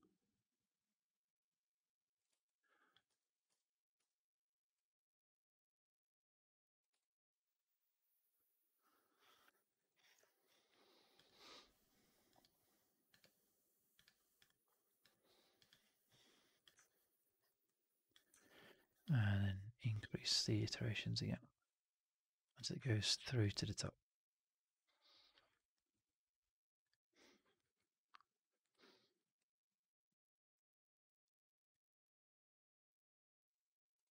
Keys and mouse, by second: 2.3 alt+click, 3.0 w, 3.4 4, 3.9 w, 3.9 r, 4.7-6.7 drag, 6.9-9.4 alt+drag, 9.6 alt+right click, 9.8 alt+click, 16.5 click, 16.7 alt+click, 17.2 alt+right click, 17.4 alt+click, 18.3 alt+click, 18.5 alt+middle click, 18.6 alt+right click, 18.8 alt+click, 21.1-22.7 drag, 22.8-23.3 alt+drag, 23.5 alt+right drag, 23.6-25.2 alt+drag, 25.4 alt+right click, 25.6 alt+click, 33.9 drag.